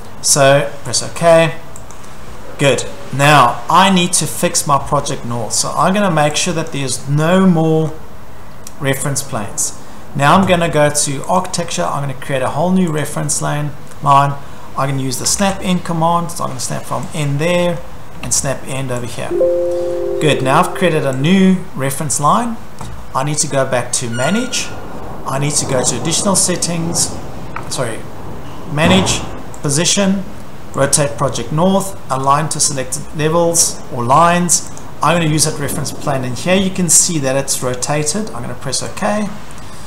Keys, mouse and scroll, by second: 1.1 click, 2.0 click, 2.2-4.0 scroll, 3.2 Escape, 6.7 click, 7.1 Escape, 7.8-8.2 scroll, 9.0-10.2 scroll, 11.4 click, 13.0 click, 13.4-13.9 scroll, 15.0-15.9 typing, 17.2 click, 17.4-18.1 scroll, 17.8-18.7 typing, 19.1 click, 19.8 Escape, 20.0 scroll, 20.2 Escape, 20.4 Escape, 20.9-21.6 typing, 21.3 click, 22.2 Escape, 24.4 click, 25.9 click, 27.6 Escape, 29.7 click, 30.9 click, 32.2 click, 38.2 click, 39.0 click.